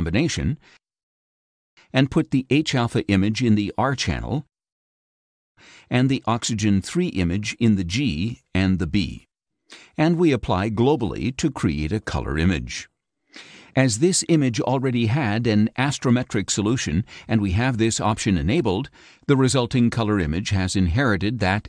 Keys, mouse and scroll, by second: 2.0-4.0 drag, 6.1-8.4 drag, 9.9-13.7 drag, 17.8 click, 19.1 click, 20.5 click.